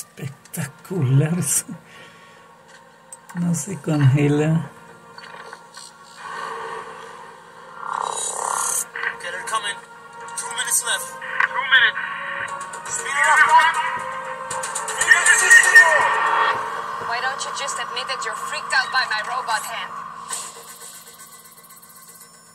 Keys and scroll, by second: 19.1 super+4, 20.7 super+5.